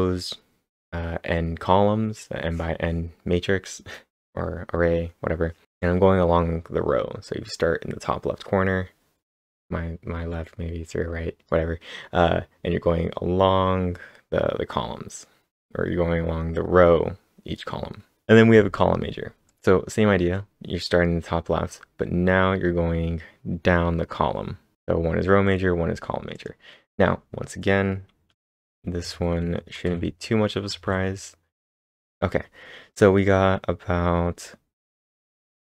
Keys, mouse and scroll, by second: 18.3 click, 18.3-19.5 scroll down 1, 19.5 click, 25.6-26.3 scroll down 2, 26.3 click, 26.3 scroll down 1, 28.4 ctrl+/, 29.0 k, 29.9 ctrl+/, 30.7 ctrl+s.